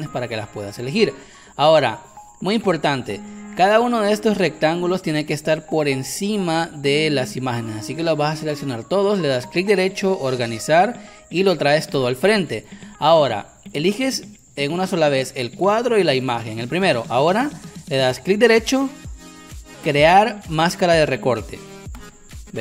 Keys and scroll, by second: 4.3 Caps_Lock.